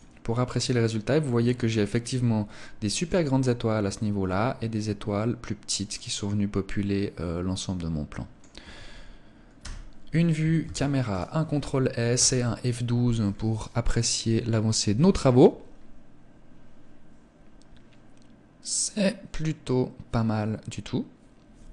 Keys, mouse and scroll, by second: 0.1 middle click, 5.1 middle click, 8.8 KP_0, 9.9 ctrl+s.